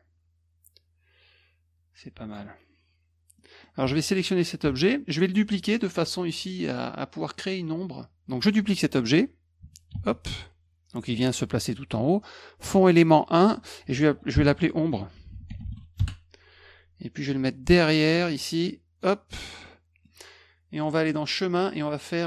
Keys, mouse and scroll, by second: 2.3 click, 3.4 middle drag, 3.8 F2, 4.0 click, 4.6 F1, 4.9 middle click, 9.9 ctrl+d, 12.8 click, 12.9 click, 13.3 click, 14.3-16.2 typing, 17.2-19.0 drag, 19.6 middle click, 20.9 click.